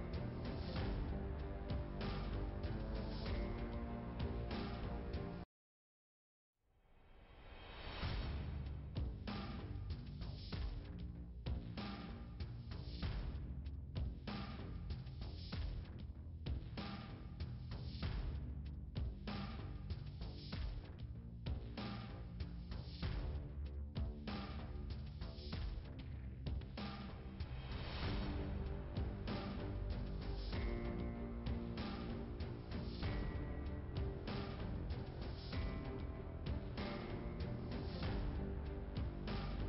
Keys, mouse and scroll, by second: 0.9 click, 1.7 click, 1.9 double click, 9.1 click, 9.3 click, 9.4 double click, 13.5 click, 13.7 double click, 15.8 middle click, 17.8 click, 18.0 double click, 21.1 scroll down 2, 23.8 scroll up 2, 24.7 click, 24.9 click, 25.0 double click, 25.2 scroll down 2, 26.8 scroll up 2, 27.9 middle click, 28.7 scroll up 1, 30.2 click, 32.9 click, 33.1 click, 37.0 click, 37.1 click, 38.1 click, 38.6 click, 38.6 double click, 39.1 scroll down 2.